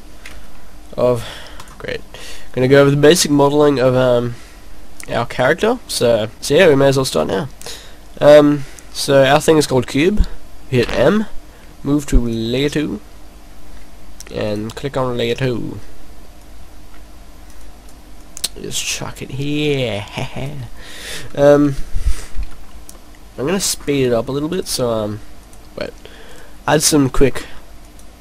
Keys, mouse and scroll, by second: 4.9 click, 5.9 scroll down 2, 6.0 middle click, 6.3 middle click, 6.3-6.7 scroll up 4, 7.2 click, 10.8 m, 14.5 click, 15.0 middle click, 16.5 click, 17.6 click, 18.1 click, 19.9 click, 21.6 KP_0, 22.0 KP_0, 22.2 scroll up 5, 22.6 scroll down 2, 23.1 middle click, 23.5-23.9 scroll up 2, 24.6 click, 25.3 click, 27.1-27.4 scroll down 5, 27.8 click.